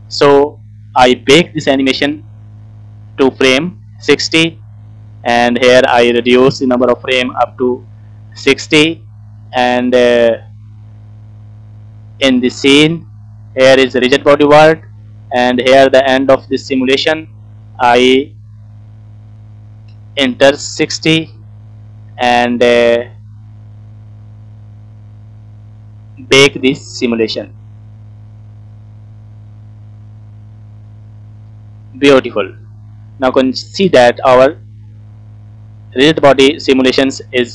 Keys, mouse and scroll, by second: 0.5 middle click, 0.5 scroll down 1, 1.6 shift+middle click, 2.1 scroll up 1, 2.4-4.0 middle drag, 5.5-7.4 drag, 8.3 scroll down 2, 8.5 middle click, 9.4 scroll up 2, 12.1 click, 13.8 click, 15.2 scroll down 1, 16.3-21.1 drag, 22.6-23.0 scroll down 3, 22.8 middle click, 25.8 click, 26.9 click, 29.6 scroll down 2, 30.0 middle click, 31.0 click, 31.3-31.7 scroll up 2, 31.7 middle click, 32.5-33.0 scroll down 2, 32.8 middle click, 33.3 space, 34.1 scroll up 3, 34.8 scroll up 3, 35.5 scroll down 2.